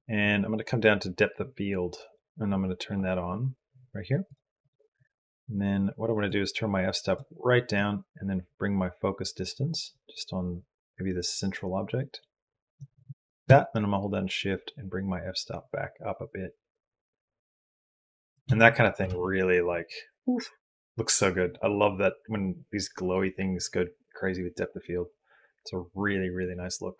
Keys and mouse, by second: 4.1 click, 4.4 click, 6.2 click, 7.6-12.6 drag, 13.4-14.6 shift+drag, 14.6-18.1 shift+middle drag, 18.9 ctrl+space.